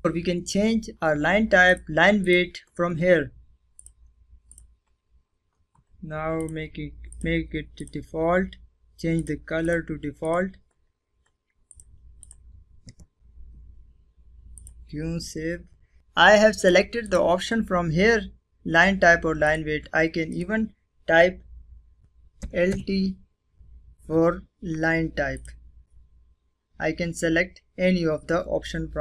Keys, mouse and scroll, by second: 0.5 click, 4.0 scroll up 1, 5.2 click, 13.4 click, 16.0 click, 18.2 click, 21.2-21.5 typing, 24.1 click.